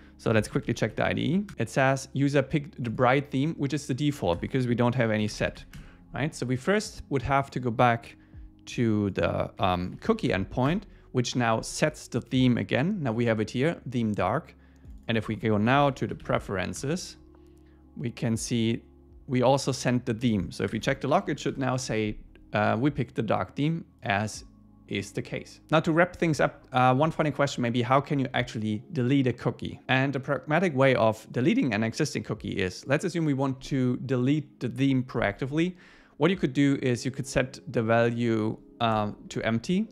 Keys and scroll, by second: 1.5 Return, 5.8 Return, 10.7 Return, 16.8 Return, 21.5 Return.